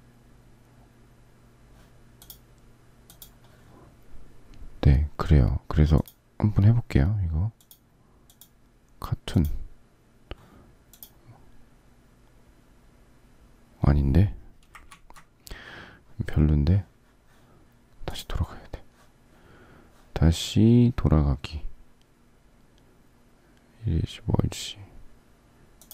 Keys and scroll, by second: 14.8 ctrl+z.